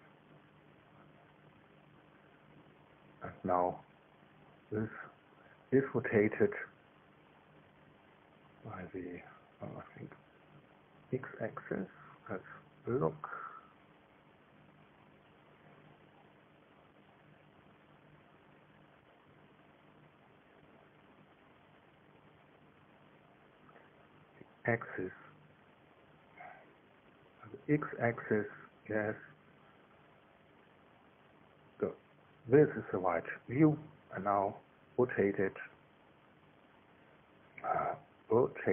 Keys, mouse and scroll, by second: 0.7-8.0 shift+middle drag, 11.0 middle click, 18.9 click, 21.9 click, 24.8 click, 25.8 click, 26.6 KP_1, 26.8 Tab, 27.1 KP_0, 27.3 Tab, 27.7 KP_0, 28.2 KP_Enter, 29.4-31.3 drag, 31.3 KP_1, 31.9 KP_3.